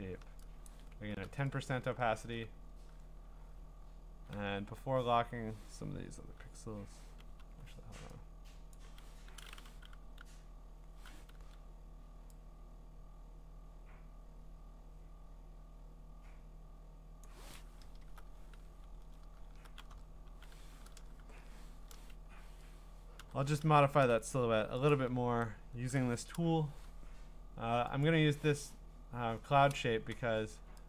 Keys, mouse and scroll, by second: 0.0 click, 0.7 click, 0.7 click, 1.8 alt+!, 1.9 scroll, 7.4 b, 8.7-11.8 drag, 10.2 u, 11.3 [, 14.1 [, 17.2 click, 17.9 alt+BackSpace, 18.5 ctrl+d, 19.0-19.6 scroll, 21.2 ctrl+u, 22.2 Escape, 23.2 Escape, 24.9 click, 29.3 Escape.